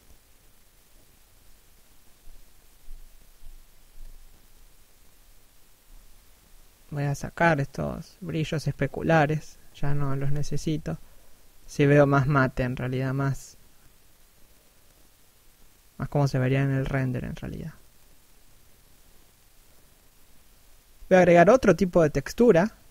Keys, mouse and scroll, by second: 1.4-2.1 scroll up 1, 9.4 middle click, 11.2 middle click, 12.9 scroll up 1, 13.1 middle click.